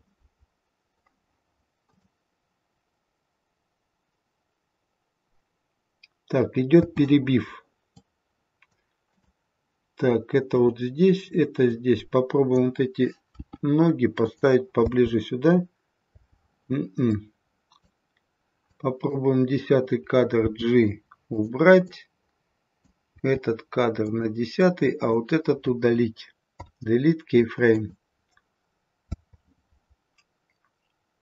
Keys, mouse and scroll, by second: 1.8 click, 6.9 space, 7.9 click, 9.1 click, 10.4 click, 11.5 click, 13.3 g, 16.0 space, 17.1 click, 18.7 click, 20.3 g, 21.7 click, 23.1 g, 24.5 click, 26.4 Delete, 29.0 space.